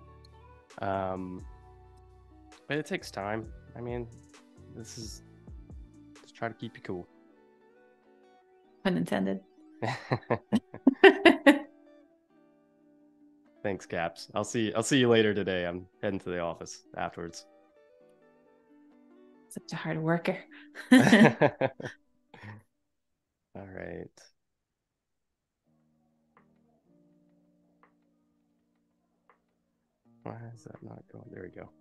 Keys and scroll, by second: 0.2 a, 1.9 space, 3.4 super+-, 7.8 super+=, 8.6 space, 12.8 p, 20.3 a, 21.0 super+c, 21.4 BackSpace, 23.1 super+f, 25.0 i, 25.6 a, 26.0 space, 27.2 super+c, 27.6 Delete, 29.2 super+f, 30.7 super+[.